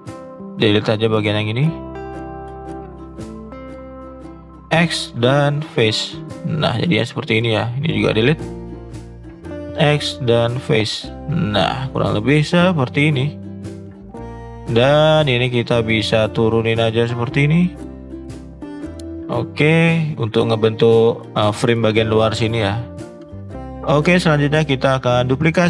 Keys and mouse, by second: 0.5 shift+click, 1.0 shift+click, 2.0 middle click, 2.5 middle click, 4.2 middle click, 4.7 x, 6.3-6.6 middle drag, 6.9 middle drag, 7.7 click, 8.1 shift+click, 9.6 x, 10.8-11.2 middle drag, 11.5-11.9 middle drag, 12.1-12.5 middle drag, 12.8 middle click, 13.2 middle drag, 13.5 middle click, 14.5 click, 14.8 middle click, 15.4 click, 15.7 shift+click, 16.3-17.5 drag, 17.8 middle click, 18.2 middle click, 18.6 middle click, 19.0-19.5 middle drag, 20.3 middle click, 20.6 middle click, 21.0 middle drag, 21.5 middle click, 23.3 middle click, 23.5 ctrl+z.